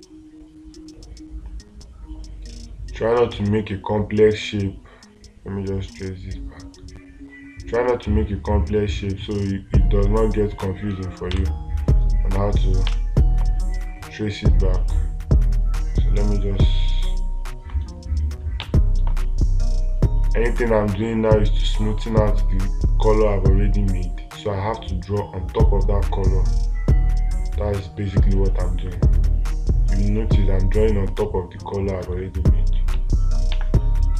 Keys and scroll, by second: 11.8 space, 34.0 space.